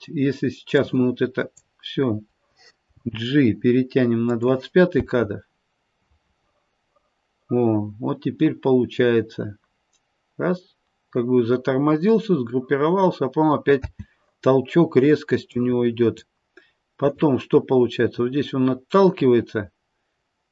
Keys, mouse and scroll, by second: 0.6 click, 3.0 g, 5.0 space, 13.8 space, 15.5 click, 17.1 click.